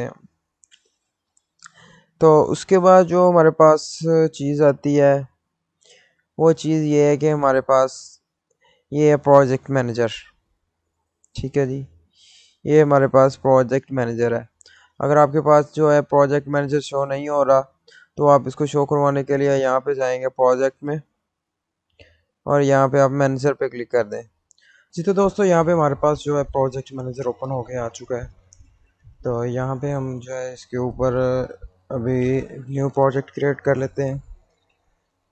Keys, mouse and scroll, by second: 2.1 click, 6.5 click, 6.5 click, 16.1 click, 16.2 click, 21.7 click, 23.9 click, 30.1 click, 30.2 click.